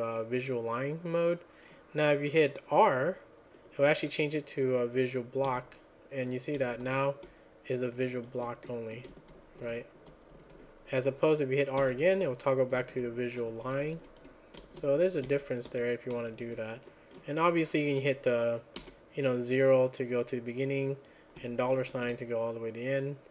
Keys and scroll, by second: 0.0-0.6 typing, 6.4-16.6 typing, 18.7 typing, 22.0 shift+4.